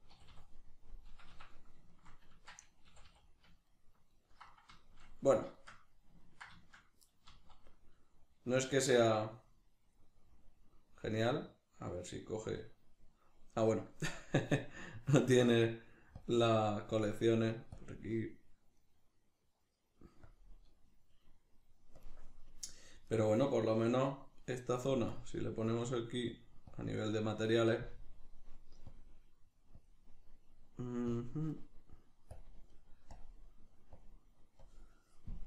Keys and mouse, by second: 0.1 a, 2.3 Tab, 7.3 z, 16.2-18.8 drag, 18.8-20.3 middle drag, 20.3-23.1 drag, 23.1 right click, 25.1-35.4 drag.